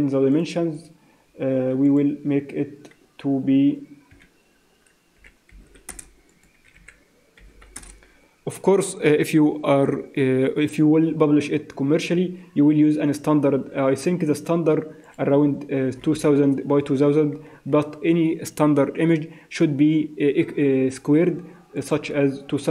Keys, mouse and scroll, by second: 0.3 click, 0.7 click, 1.8 click, 5.6 0, 6.3 click, 7.5 0, 15.0 click, 16.1 0, 21.8 click.